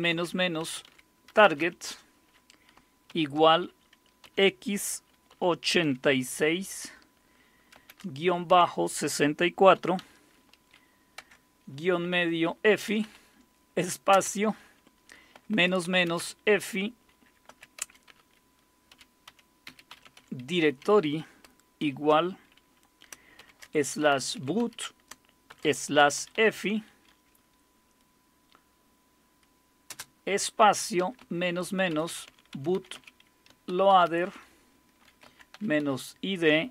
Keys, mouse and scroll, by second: 0.0-1.6 typing, 3.1 typing, 4.2 typing, 5.3-5.8 typing, 7.8 typing, 9.7 typing, 11.2 typing, 12.7-13.0 typing, 14.1 typing, 15.3-16.2 typing, 17.5-20.7 typing, 21.8 typing, 23.4-26.9 typing, 29.9 space, 31.0-36.3 typing.